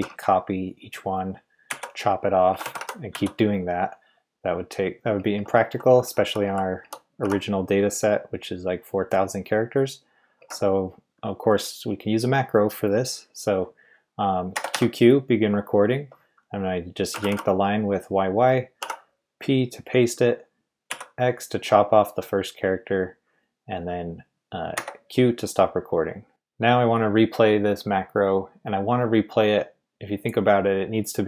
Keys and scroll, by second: 1.7-3.6 typing, 5.1-6.0 typing, 10.4 typing, 14.5 typing, 17.1 typing, 18.8 typing, 20.9 typing, 24.7 typing.